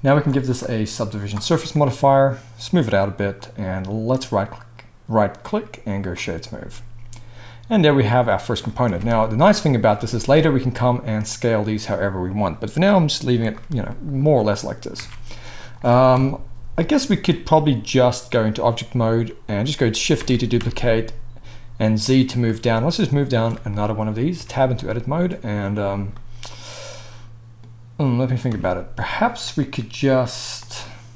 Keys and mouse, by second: 4.1-13.5 middle drag, 8.8 Tab, 10.0 s, 11.0-12.0 drag, 11.0-12.0 right drag, 13.5-17.3 drag, 15.0 Tab, 16.1 KP_1, 17.3 right click, 20.2 shift+d, 24.1-31.1 right drag, 24.3 Tab, 28.5 Tab.